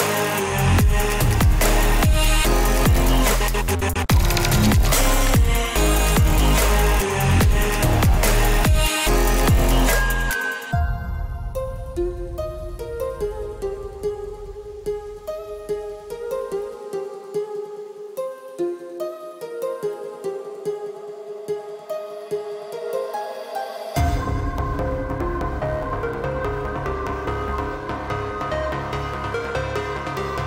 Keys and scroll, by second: 6.3 shift+F5, 27.9 ctrl+z.